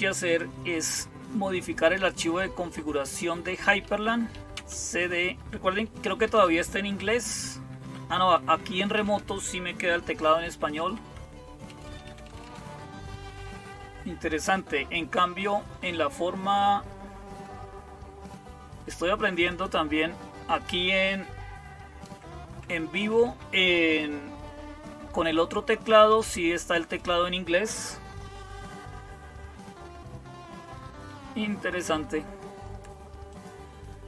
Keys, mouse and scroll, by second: 3.7-4.4 typing, 5.8 typing, 7.2-8.8 typing, 10.5-12.3 typing, 19.3-21.2 drag, 33.1 click, 33.9 click.